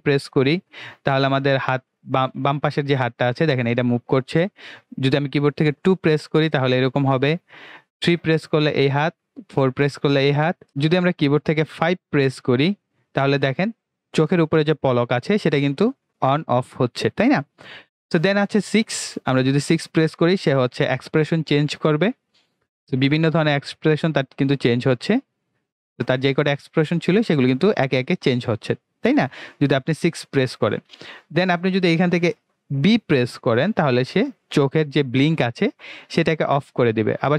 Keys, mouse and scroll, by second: 33.9 b, 36.7 b.